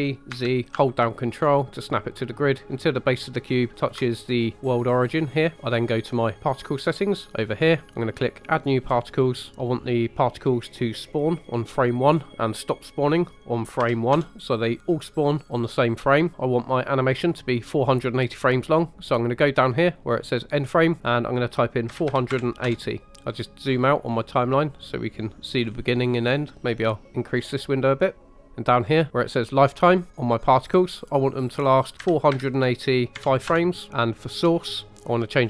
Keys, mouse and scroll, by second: 0.3 z, 3.7 ctrl+click, 7.5 click, 8.3 click, 11.9-14.1 drag, 16.3 click, 20.8-22.7 drag, 23.3-24.5 scroll down 6, 24.5 middle click, 25.6-26.7 scroll up 2, 26.7 click, 27.3 scroll up 2, 27.9 middle click, 30.9-34.5 drag.